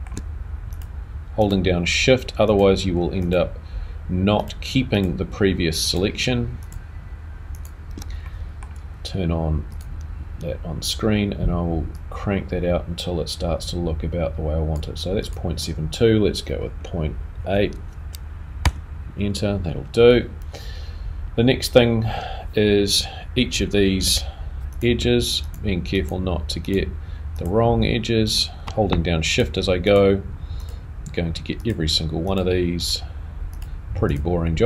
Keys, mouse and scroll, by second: 0.7 alt+shift+click, 1.4 alt+shift+click, 7.9 alt+shift+click, 8.2 middle click, 9.7 click, 25.0 shift+2.